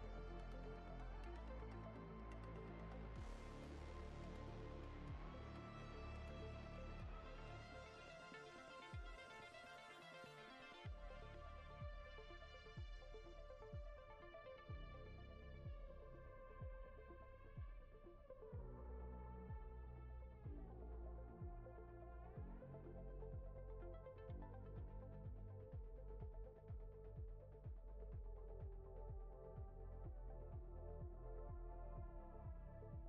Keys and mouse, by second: 0.1 middle click, 0.3 click, 0.5 click, 0.8 middle click, 1.1 click, 1.6 click, 1.8 click, 2.0 click, 2.1 click, 2.4 middle click, 2.7 click, 2.8 click, 3.0 click, 3.4 click, 3.6 click, 3.8 middle click, 4.1 click, 4.5 click, 4.7 middle click, 5.0 click, 5.2 click, 5.3 click, 5.6 click, 5.8 middle click, 6.2 ctrl+middle click, 6.7 middle click, 7.1 click, 7.3 click, 7.5 click, 7.7 click, 8.1 click, 8.2 click, 8.4 middle click, 8.7 click, 8.9 click, 9.1 click, 9.4 click, 9.7 click, 9.9 click, 10.1 click, 10.3 middle click, 10.5 click, 11.1 middle click, 11.4 click, 11.6 click, 11.8 click, 12.1 click, 12.3 middle click, 12.6 click, 12.8 click, 13.1 click, 13.3 middle click, 13.6 click, 13.8 middle click, 14.1 click, 14.3 click, 15.0 middle click, 15.2 ctrl+middle click, 15.4 middle click, 15.8 middle click, 16.2 shift+click, 17.0 ctrl+middle click, 17.2 ctrl+middle click, 17.4 middle click, 17.8 click, 18.1 click, 18.3 click, 18.5 click, 18.8 click, 19.4 click, 19.6 click, 19.8 click, 20.0 middle click, 20.4 middle click, 20.7 click, 20.9 click, 21.1 click, 21.3 click, 21.4 click, 21.7 middle click, 22.0 click, 22.2 click, 22.4 click, 22.8 click, 22.9 click, 23.1 click, 23.3 click, 23.5 click, 23.7 click, 24.0 click, 24.2 middle click, 24.5 click, 24.8 click, 25.0 shift+middle click, 25.2 middle click, 25.4 ctrl+middle click, 26.0 middle click, 27.2 middle click, 27.6 middle click, 27.9 middle click, 28.5 click, 28.6 click, 28.8 click, 29.1 click, 29.3 middle click, 29.6 click, 29.8 click, 30.0 click, 30.2 click, 30.4 click, 30.7 click, 30.9 click, 31.1 click, 31.3 click, 31.5 click, 31.7 click, 31.9 click, 32.1 click, 32.4 click, 32.7 click, 32.8 middle click.